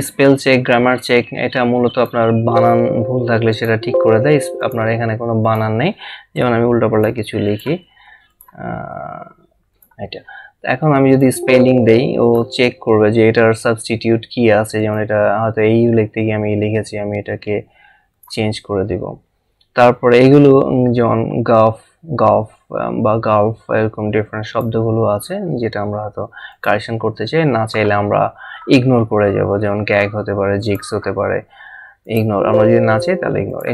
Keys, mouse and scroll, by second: 2.5 click, 3.5 click, 14.8 click, 18.1 click, 24.5 click, 26.5 click, 30.6 click.